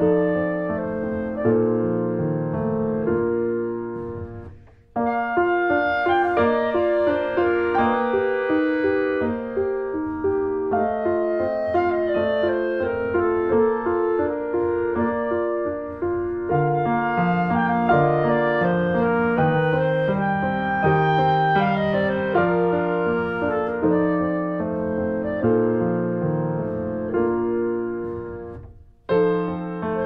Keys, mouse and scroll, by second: 3.3 ctrl+s, 3.3 middle click, 3.5-3.9 scroll up 2, 3.6 shift+middle click, 3.9 middle click, 4.8-5.2 scroll up 2, 5.2-7.8 middle drag, 7.8 scroll up 2, 8.0-10.2 middle drag, 10.2 scroll down 2, 10.4 middle click, 11.2 scroll down 2, 11.4-13.4 middle drag, 13.4 click, 13.6 middle click, 14.3-14.7 scroll up 1, 14.7 middle click, 15.1-15.7 scroll up 3, 15.4 shift+middle click, 15.7-18.4 middle drag, 18.4 scroll down 1, 18.5 middle click, 19.1-19.6 scroll down 2, 19.6 middle click, 20.3 scroll down 2, 20.5-22.5 middle drag, 22.5 scroll up 1, 22.8 middle click, 23.7 click, 24.2 a, 25.4 middle click, 25.7 ctrl+s, 25.8-26.5 scroll up 3, 26.0 middle click, 26.7-28.0 shift+middle drag, 28.0 ctrl+s, 28.2 shift+middle click, 28.6 shift+a.